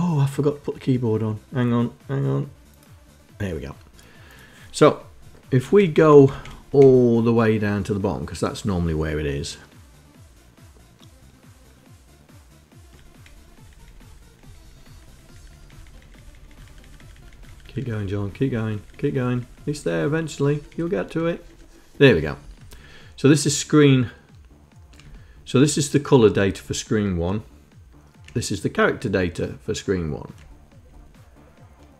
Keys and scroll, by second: 5.6 Page_Down, 5.9 Page_Down, 12.9 Page_Down, 13.1 Page_Down, 13.2 Page_Down, 13.7 Page_Down, 13.9 Page_Down, 14.1 Page_Down, 14.2 Page_Down, 14.4 Page_Down, 14.5 Page_Down, 14.7 Page_Down, 14.9 Page_Down, 15.0 Page_Down, 15.2 Page_Down, 15.3 Page_Down, 15.5 Page_Down, 15.7 Page_Down, 15.8 Page_Down, 16.0 Page_Down, 16.2 Page_Down, 16.3 Page_Down, 16.5 Page_Down, 16.7 Page_Down, 17.0 Page_Down, 17.5 Page_Down, 17.6 Page_Down, 17.8 Page_Down, 18.0 Page_Down, 18.3 Page_Down, 18.4 Page_Down, 18.6 Page_Down, 18.8 Page_Down, 19.1 Page_Down, 19.2 Page_Down, 19.6 Page_Down, 19.7 Page_Down, 19.9 Page_Down, 20.0 Page_Down, 20.2 Page_Down, 20.4 Page_Down, 20.5 Page_Down, 20.7 Page_Down, 20.9 Page_Down, 21.0 Page_Down, 21.1 Page_Down, 22.1 Up, 24.7 Down, 26.2 Down, 28.7 Down, 30.5 Down.